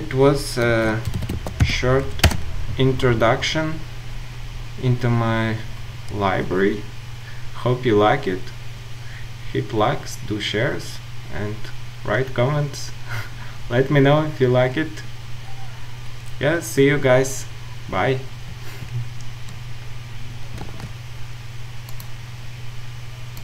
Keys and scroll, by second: 0.7 ctrl+shift+super+a.